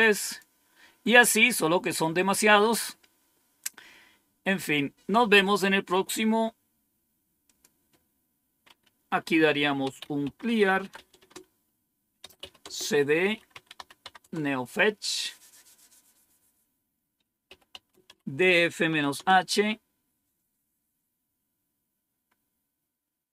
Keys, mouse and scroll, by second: 0.1 click, 7.4 click, 9.5-14.5 typing, 17.2-19.1 typing.